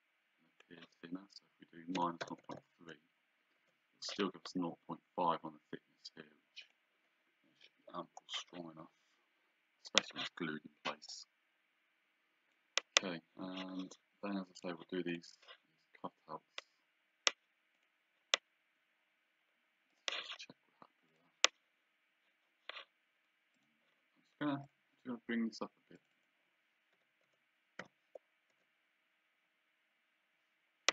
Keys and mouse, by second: 2.0 KP_Subtract, 2.2 KP_0, 2.5 KP_3, 6.6 click, 11.1 click, 14.6 click, 17.8 click, 19.9 click, 21.1 click, 23.6 right click, 24.7 click, 26.0 click, 26.9 KP_1, 27.3 KP_Decimal, 27.8 KP_4, 28.5 Return, 28.5 KP_Enter.